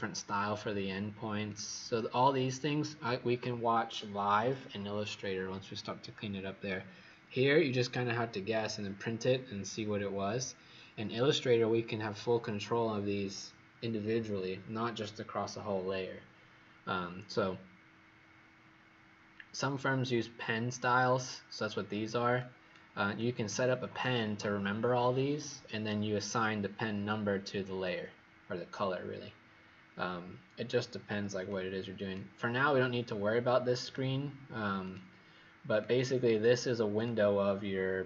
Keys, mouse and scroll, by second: 1.4 click, 35.9 click, 36.9 click.